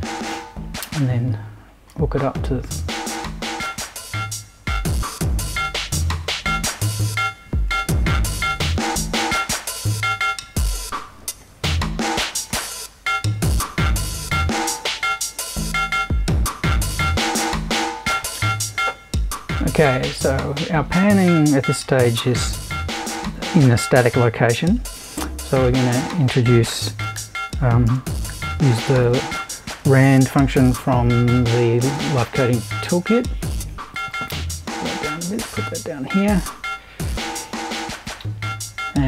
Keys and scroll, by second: 25.0 super+i, 26.5-31.3 typing.